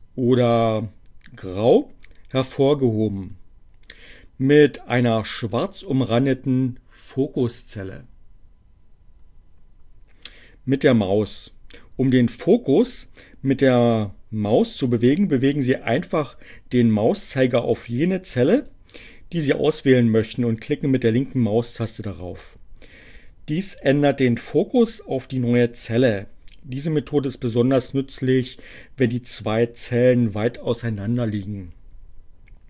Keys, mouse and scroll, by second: 16.2 click, 18.2 click, 19.1 click, 29.6 click.